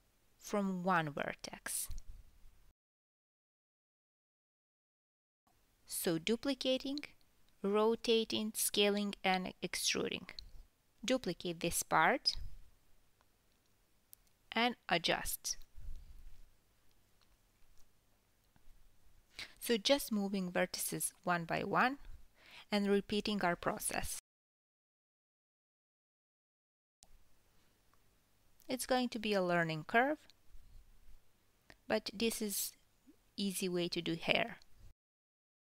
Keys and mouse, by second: 0.0 alt+s, 0.0 click, 0.3 alt+s, 0.9 alt+s, 1.0 alt+s, 2.2 alt+s, 2.7 alt+s, 2.8 alt+s, 3.2 KP_7, 3.7-4.0 drag, 3.7-4.0 middle drag, 4.1 KP_3, 4.8 e, 6.5 Tab, 7.5 KP_1, 9.1 shift+d, 11.3 KP_7, 11.9 r, 12.9 g, 14.1 Tab, 14.4-14.9 drag, 15.0 alt+s, 15.7 alt+s, 16.1 alt+s, 17.2 alt+s, 17.3 alt+s, 17.6 KP_3, 18.2 g, 21.3 KP_1, 21.7-22.6 drag, 21.7-22.6 middle drag, 22.6 g, 23.7 g, 24.7 Tab, 25.8 KP_3, 28.1-31.9 typing, 33.2 r, 33.7 g, 35.2 KP_1.